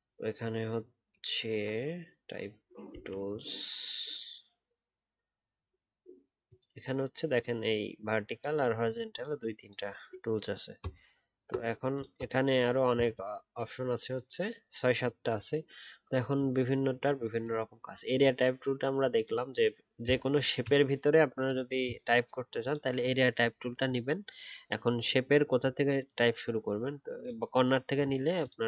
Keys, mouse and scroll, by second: 20.0 shift+click, 23.6 alt+scroll up 1.